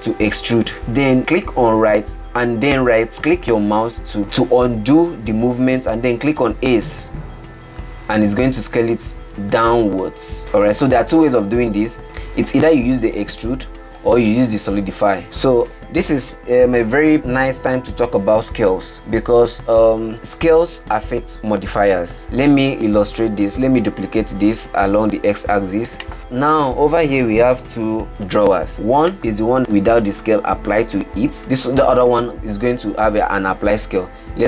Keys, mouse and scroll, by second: 0.0 e, 7.2 s, 12.0 ctrl+z, 13.1 middle click, 13.8 scroll down 1, 14.0-15.2 shift+middle drag, 15.2 Tab, 15.7-17.7 middle drag, 22.5-25.6 middle drag, 25.6 shift+d, 28.1-29.2 shift+middle drag, 31.4 click.